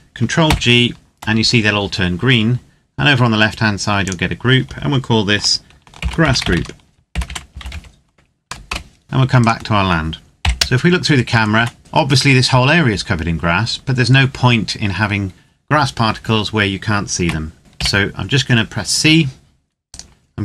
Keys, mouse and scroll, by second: 0.2 ctrl+g, 2.2-3.7 scroll up 1, 3.7 click, 5.7-8.1 typing, 8.4 Return, 9.0 click, 9.2 right click, 10.1 KP_7, 10.5 KP_0, 11.2 Tab, 16.9 a, 17.6 c, 18.0-19.6 scroll down 1, 19.6 right click, 20.3 z.